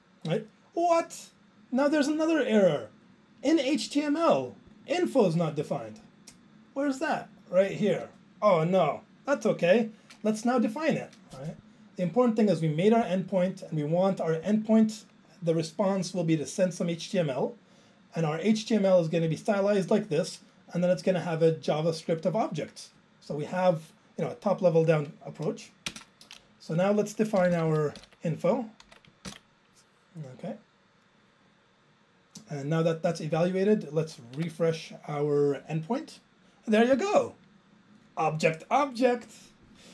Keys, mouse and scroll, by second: 7.1 click, 7.2 click, 7.3 double click, 7.4 double click, 7.7 click, 7.9 click, 13.0 click, 13.4 click, 14.4 click, 14.6 click, 14.7 double click, 14.8 double click, 18.6 click, 19.3 click, 20.0 click, 20.1 click, 21.0 click, 21.1 click, 23.3 click, 25.9 alt+space, 27.4 ctrl+k, 27.6 ctrl+k, 27.7 ctrl+k, 28.0 ctrl+k, 32.0 ctrl+j.